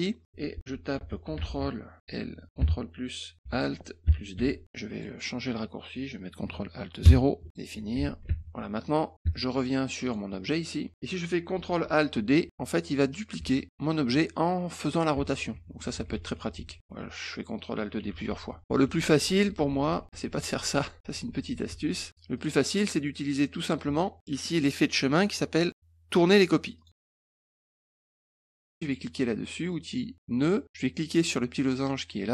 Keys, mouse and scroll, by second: 0.7-1.9 typing, 3.4 t, 4.3 d, 4.9 click, 7.5 click, 8.2 alt+Tab, 9.2 alt+Tab, 10.0 alt+click, 12.4 ctrl+alt+d, 15.3 ctrl+alt+d, 15.6 ctrl+alt+d, 15.8 ctrl+alt+d, 16.0 ctrl+alt+d, 16.2 ctrl+alt+d, 16.4 ctrl+alt+d, 16.6 ctrl+alt+d, 16.9 ctrl+alt+d, 18.0 ctrl+alt+d, 18.2 ctrl+alt+d, 18.4 ctrl+alt+d, 18.5 ctrl+alt+d, 18.6 ctrl+z, 18.8 ctrl+z, 19.0 ctrl+z, 19.2 ctrl+z, 19.4 ctrl+z, 19.6 ctrl+z, 19.8 ctrl+z, 20.1 ctrl+z, 20.3 ctrl+z, 20.5 ctrl+z, 20.8 ctrl+z, 21.0 ctrl+z, 21.3 ctrl+z, 21.7 ctrl+z, 22.3 click, 25.1 click, 26.7 click, 29.7 click.